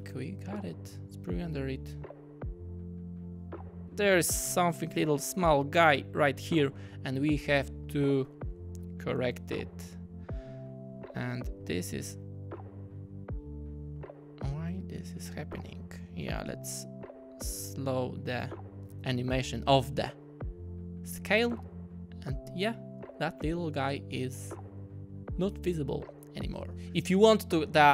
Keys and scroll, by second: 3.8 space, 6.9 typing, 26.6 typing.